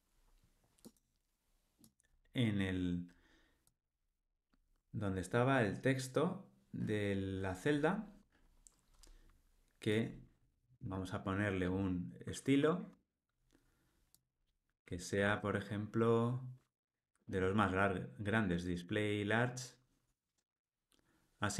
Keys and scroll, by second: 12.9 Tab.